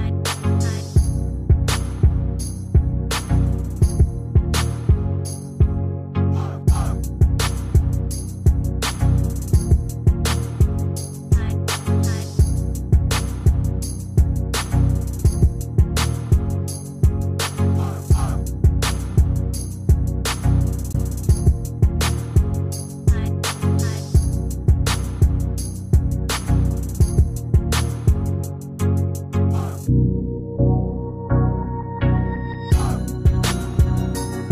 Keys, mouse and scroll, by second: 2.6 ctrl+click, 4.3 ctrl+click, 10.5 ctrl+click, 16.7 ctrl+d, 21.9 ctrl+click, 30.8 shift+click.